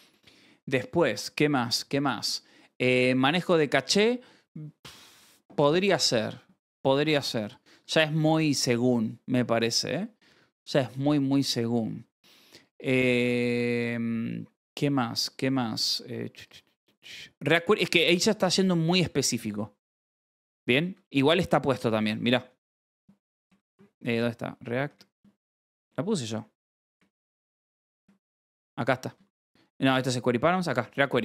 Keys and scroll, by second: 0.0 k, 0.2 ctrl+Escape, 1.0 k, 2.6 s, 7.4 scroll, 18.8 scroll, 20.9 Escape, 21.2-25.4 typing, 26.9 q, 27.3 BackSpace, 27.6 q, 28.6 Return, 29.0 v, 29.5 Escape, 29.8 n, 30.6 shift+v.